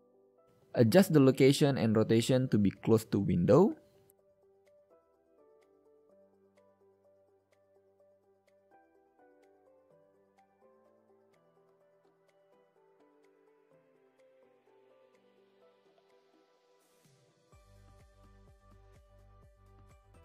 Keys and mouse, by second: 3.4 n, 10.7-12.0 middle drag, 12.0 KP_1, 13.0 g, 13.8 click, 14.2 KP_3, 16.5 n, 18.2 g.